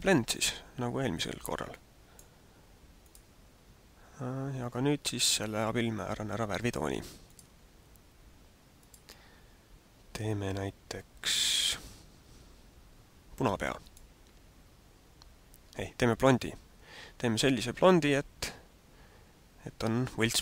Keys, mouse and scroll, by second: 1.6 click, 3.0 click, 7.2 click, 8.8 click, 13.9 click.